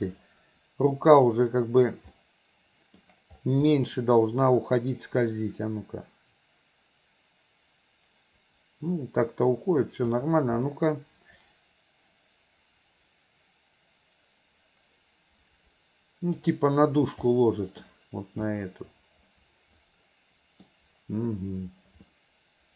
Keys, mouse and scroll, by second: 2.2-3.0 middle drag, 3.7-4.4 middle drag, 5.3-10.3 drag, 11.5-16.5 drag, 17.3-17.9 middle drag, 18.6-20.6 middle drag, 22.1-22.7 middle drag.